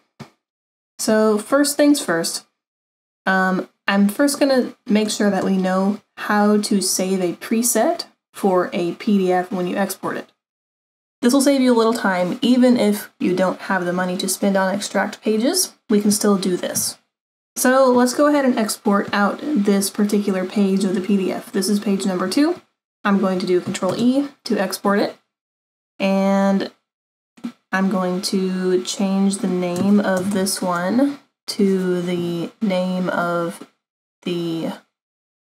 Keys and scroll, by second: 23.9 ctrl+e, 30.2 BackSpace, 30.3 BackSpace.